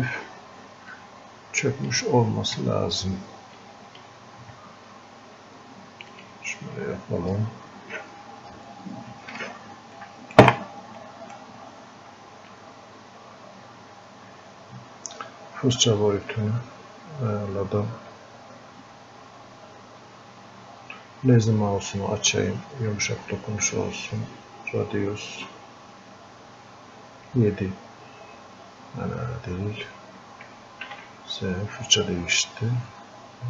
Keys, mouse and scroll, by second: 1.0-3.6 drag, 3.6-6.1 drag, 9.0 right click, 11.0-13.8 right drag, 16.3 s, 18.9-22.3 drag, 22.6-29.2 drag, 29.2-30.9 drag, 30.9 ctrl+z, 32.9 click.